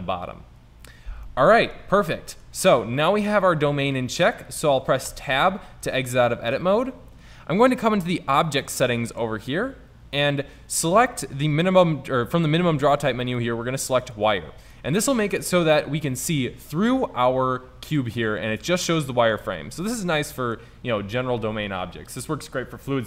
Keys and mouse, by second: 1.5 middle click, 5.2 Tab, 8.5-15.3 drag, 15.0-16.0 middle drag, 16.1-18.3 drag, 19.2 drag.